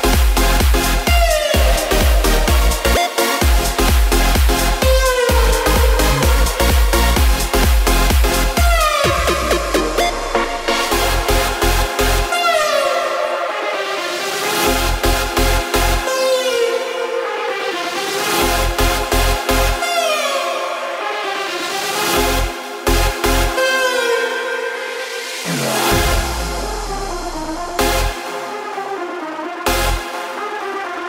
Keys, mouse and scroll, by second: 2.3-4.1 drag, 4.1 space, 5.7 space, 6.6-8.3 drag, 8.3 space, 14.9 space, 15.6-18.2 drag, 29.1-30.1 drag, 30.1 space.